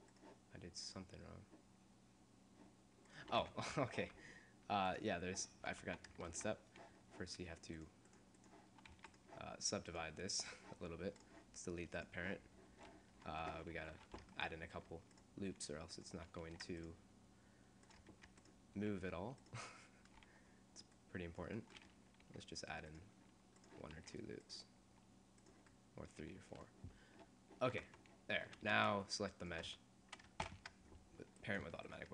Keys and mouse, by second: 3.2 right click, 3.4 Tab, 3.8 Tab, 5.8 Tab, 6.4 ctrl+Tab, 9.1 a, 10.9 click, 10.9 a, 11.9 click, 13.1 click, 13.7 Tab, 13.7 click, 14.1 Tab, 14.7 ctrl+r, 16.5 ctrl+r, 18.3 ctrl+r, 22.5 ctrl+r, 24.0 ctrl+r, 27.2 middle click, 27.8 Tab, 29.4 right click, 30.6 ctrl+p.